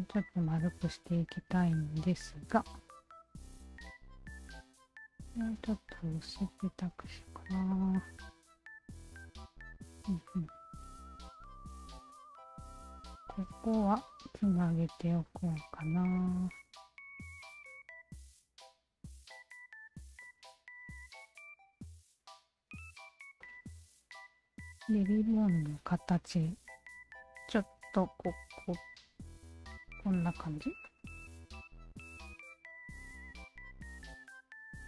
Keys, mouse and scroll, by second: 0.2 click, 0.8 shift+click, 1.6-4.3 alt+shift+drag, 4.8 r, 5.8-7.4 shift+drag, 7.7-10.8 alt+drag, 11.9 q, 12.1 alt+click, 13.1 alt+click, 14.0 shift+click, 14.0 q, 14.7 s, 15.3 shift+click, 16.1 shift+click, 17.2 s, 18.1 shift+click, 19.1 shift+click, 19.7 s, 20.2 shift+click, 21.2 shift+click, 22.9 s, 23.4-25.3 alt+shift+drag, 25.7 shift+click, 26.1 alt+click, 27.7 w, 28.7-30.6 alt+drag, 30.8-34.8 alt+drag.